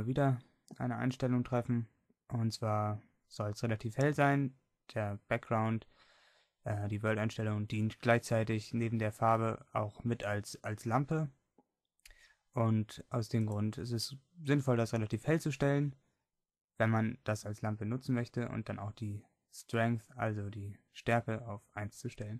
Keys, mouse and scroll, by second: 13.5-17.9 drag.